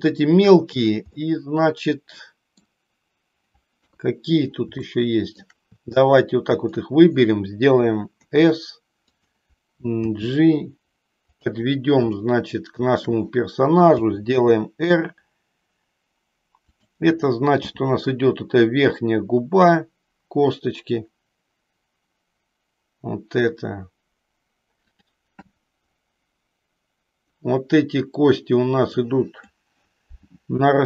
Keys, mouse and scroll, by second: 1.2-2.7 middle drag, 3.8 KP_3, 4.9 shift+middle click, 6.1 click, 8.2 s, 9.9 g, 11.5 click, 12.2 shift+middle click, 14.1 r, 17.7 g, 24.9 click, 28.8 click.